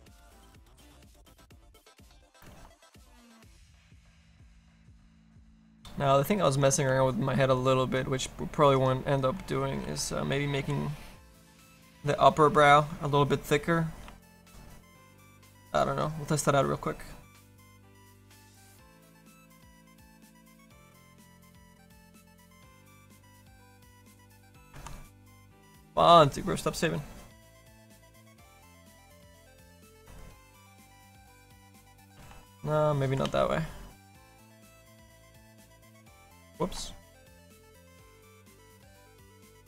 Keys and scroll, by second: 9.8 s, 10.7 s, 14.2 ctrl+z, 14.4 s, 15.6 ctrl+z, 32.3 ctrl+z, 33.3 ctrl+z, 34.4 s, 36.6 ctrl+z.